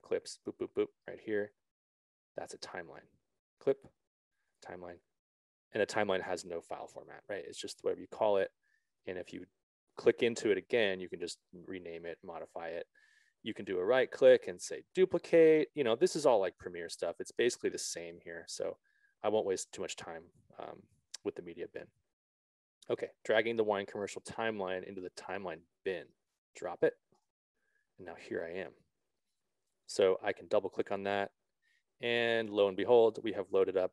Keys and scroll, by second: 20.0 ctrl+z.